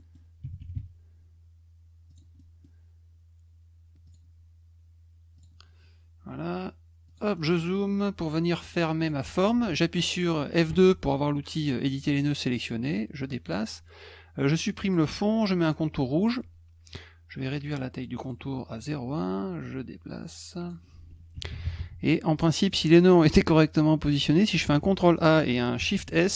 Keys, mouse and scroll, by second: 0.0 middle click, 2.1 click, 2.4 middle click, 4.0 click, 5.3 click, 7.1 click, 7.3-8.0 scroll up 5, 9.0 click, 12.9 click, 14.8 click, 15.7 middle click, 17.6 right click, 18.2 click, 19.6-20.7 drag, 23.0 middle click, 24.6 ctrl+a, 25.9 shift+s.